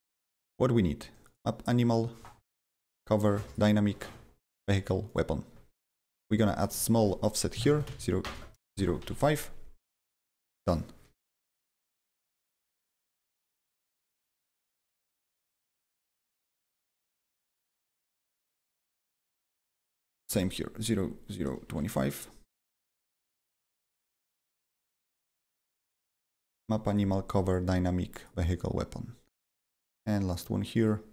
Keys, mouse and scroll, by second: 1.2 click, 2.8 click, 3.4 click, 4.5 click, 5.3 click, 5.9 click, 6.6 click, 7.5-9.5 typing, 10.2 click, 14.9 click, 18.4 click, 20.0 click, 20.8-22.1 typing, 22.7 click, 23.8 click, 25.3 click, 25.3-26.1 typing, 25.6 click, 26.5 click, 26.9 click, 27.4 click, 28.2 click, 28.5 click, 29.7 click, 30.8 right click.